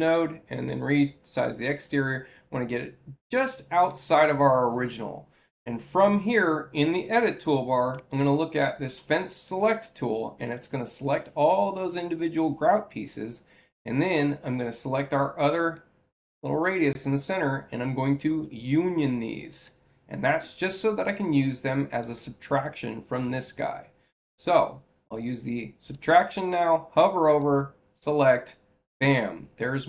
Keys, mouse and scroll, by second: 0.5-3.8 drag, 9.3 click, 15.5 ctrl+click, 19.4 click, 21.9 click, 25.8 click, 27.3 click.